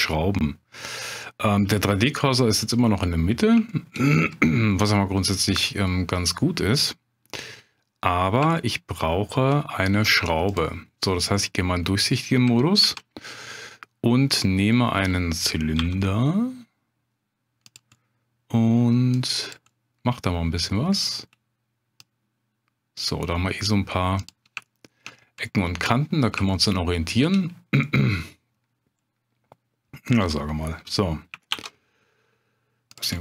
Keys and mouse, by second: 1.2 middle click, 2.6 middle click, 3.7 shift+middle click, 4.7 middle click, 7.4 middle click, 8.6 shift+middle click, 10.5-11.4 drag, 11.4 middle click, 12.8 shift+a, 14.7 middle click, 15.8 s, 17.6 click, 18.0 middle click, 19.2 click, 19.7 middle click, 21.0 middle click, 22.1 click, 24.2 click, 24.6 shift+click, 25.4 middle click, 26.5 shift+click, 27.8 middle click, 30.2 s, 31.5 shift+z, 32.9 click, 33.1 middle click.